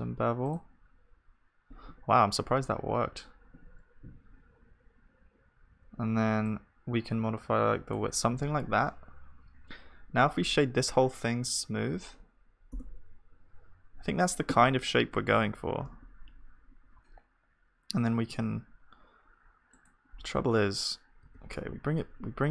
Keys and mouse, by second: 3.7 Tab, 10.4 F3, 15.1 g, 20.2-22.5 middle drag, 21.3 g.